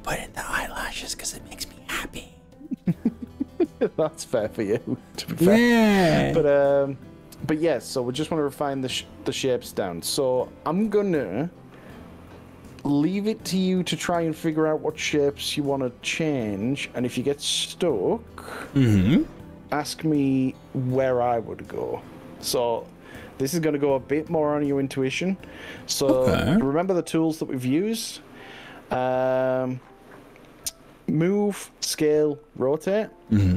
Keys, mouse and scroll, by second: 5.6-9.0 middle drag, 10.8 KP_1, 11.0 KP_3.